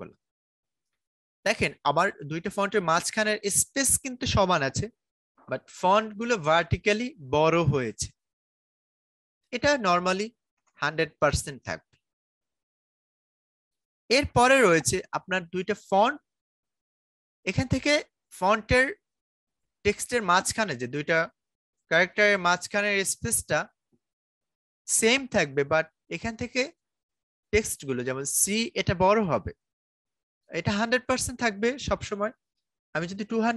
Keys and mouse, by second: 1.1-8.8 drag, 8.8-11.3 drag, 11.3 Return, 13.3-14.6 drag, 21.4-30.1 drag, 30.1-33.5 drag.